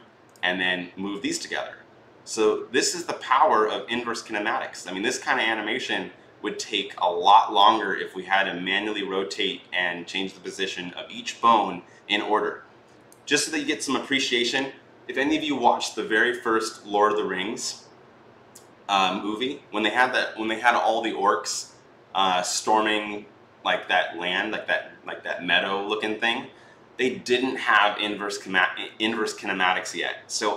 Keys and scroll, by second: 13.2 ctrl+z.